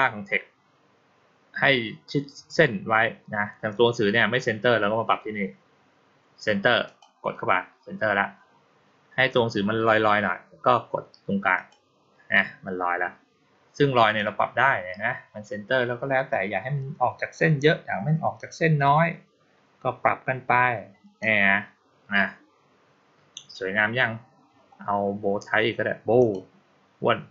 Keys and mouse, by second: 6.7 click, 11.4 click, 14.0-21.1 drag, 26.0 click.